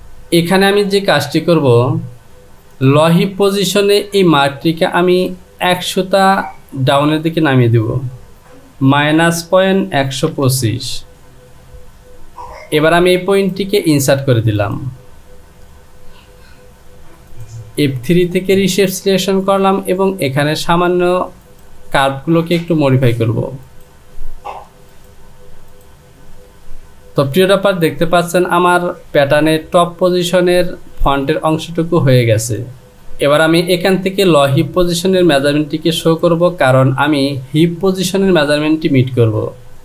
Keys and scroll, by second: 8.3 Down, 9.9 KP_1, 10.3 KP_2, 10.9 Down.